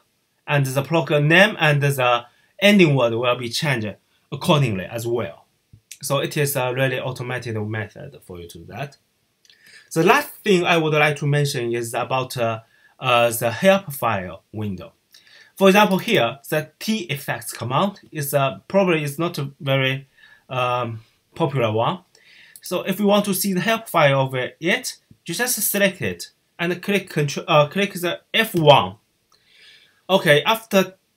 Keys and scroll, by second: 28.4 fn+F1.